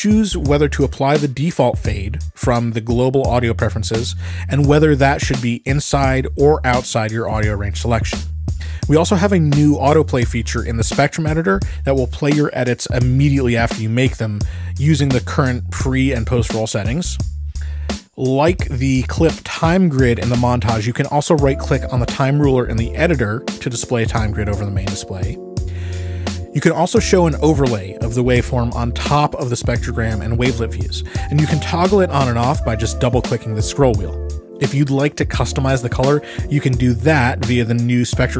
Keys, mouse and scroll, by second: 0.0 click, 1.7 click, 2.7 click, 3.4 click, 5.4 click, 6.5 click, 7.2 click, 8.3 Escape, 10.5 click, 11.9 click, 13.9 click, 22.9 scroll, 23.0 click, 24.7 click, 27.6 Escape, 28.6-30.0 drag, 30.8 click, 31.6 click, 32.4-34.4 drag, 35.0 click, 36.4 click, 38.2 click.